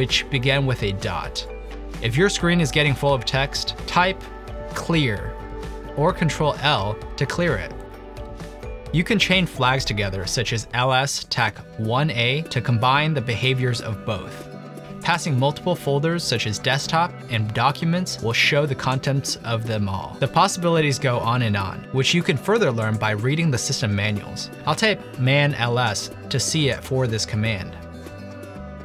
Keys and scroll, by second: 5.1-5.9 typing, 7.1 typing, 11.9-12.7 typing, 15.5-17.6 typing, 17.8 Tab, 18.6 Return, 20.4 typing, 26.7-28.3 typing.